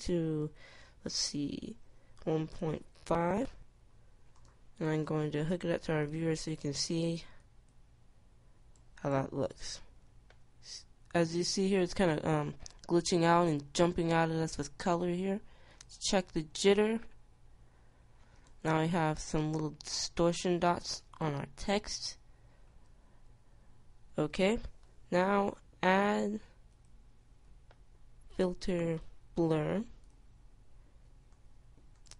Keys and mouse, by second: 28.2 click.